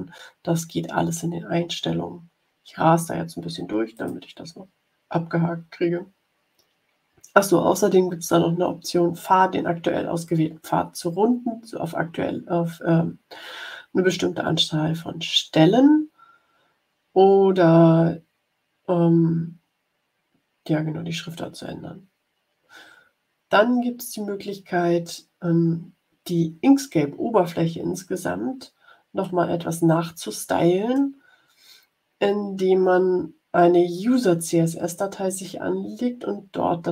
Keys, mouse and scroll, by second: 3.9 click, 20.9-21.5 scroll down 2, 23.3 scroll up 1, 29.3-31.2 drag.